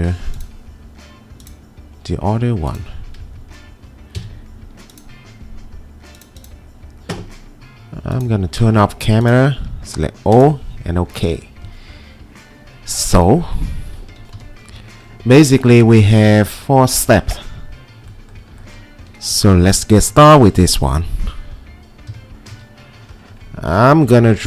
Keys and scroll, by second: 4.2 ctrl+v, 14.4 p, 21.9-23.0 typing.